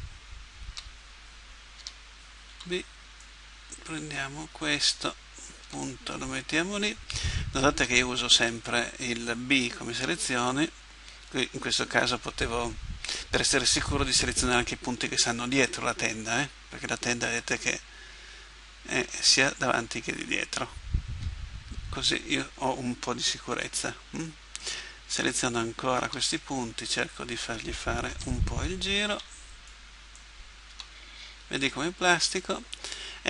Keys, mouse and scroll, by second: 0.7 a, 1.8 a, 2.5 b, 5.7 g, 9.9 a, 16.3-18.1 middle drag, 21.1 KP_1, 23.6 b, 26.1 g, 28.1 a, 29.1 b, 30.7 g.